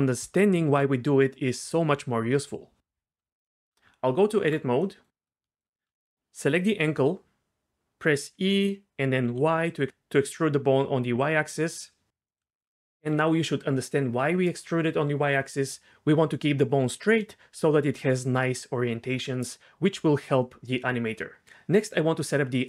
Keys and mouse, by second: 3.5 shift+middle click, 3.9 Tab, 6.6 click, 8.2 e, 9.3 y.